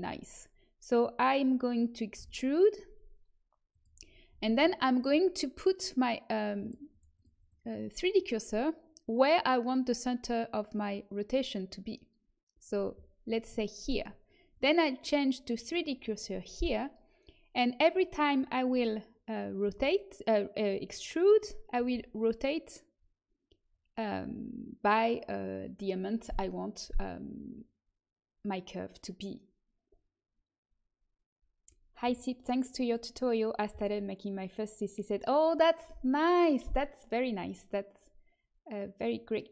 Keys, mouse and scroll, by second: 2.1 e, 6.5 right click, 6.9-13.5 drag, 13.5 middle click, 14.4-16.4 drag, 19.6 e, 21.7 r.